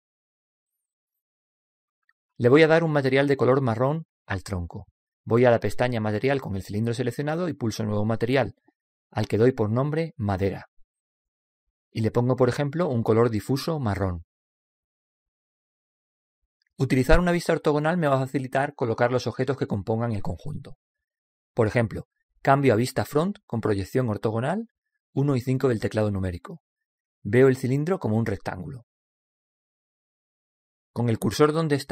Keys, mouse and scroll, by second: 6.1 click, 8.5-11.5 drag, 11.0 BackSpace, 13.8-17.0 drag, 25.6 KP_1, 26.1 KP_5, 29.6-31.5 middle drag.